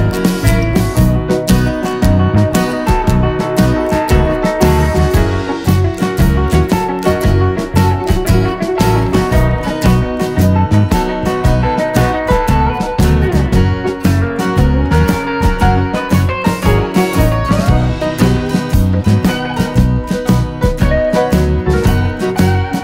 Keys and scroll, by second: 5.8 super+d.